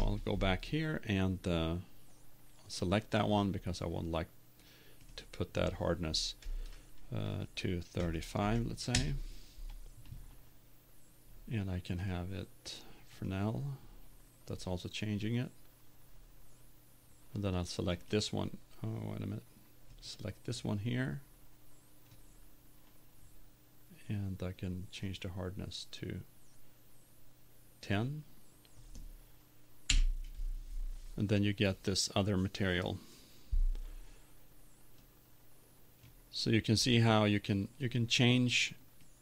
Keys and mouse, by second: 25.2 click, 29.9 click, 37.6-38.6 drag.